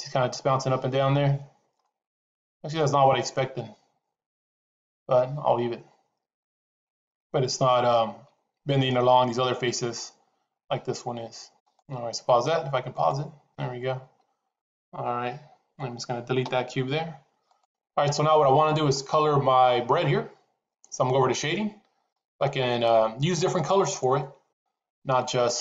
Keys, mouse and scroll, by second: 2.6 middle click, 7.2-7.7 drag, 12.0 click, 12.9 click, 16.4 Delete, 17.3 click.